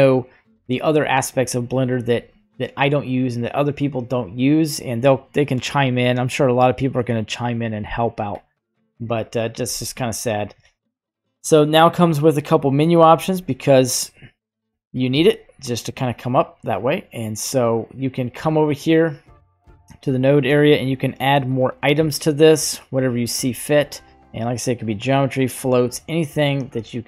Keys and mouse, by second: 5.6-8.3 drag, 13.0 click, 13.7-14.4 drag, 15.3 click, 22.9 click, 24.1-25.4 drag, 25.5 right click.